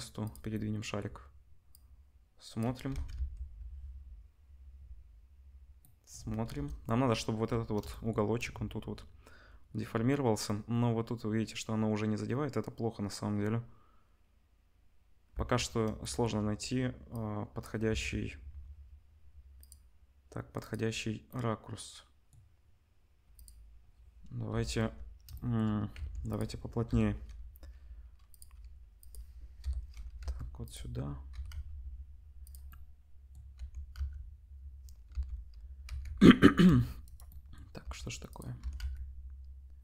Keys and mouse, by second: 1.7-6.6 drag, 2.9 ctrl+s, 3.8 space, 6.6 KP_0, 6.7 click, 15.3 space, 17.9 ctrl+s, 19.6-20.6 middle drag, 20.6 click, 20.7-23.3 middle drag, 23.3 click, 23.4-26.3 middle drag, 24.4 KP_0, 25.9 Tab, 26.3 click, 26.3-28.3 middle drag, 26.9 l, 28.3 click, 28.4 middle click, 29.0 click, 29.1-39.8 middle drag, 29.6 l, 30.2 g, 31.3 r, 33.5 r, 37.8 r, 38.6 r.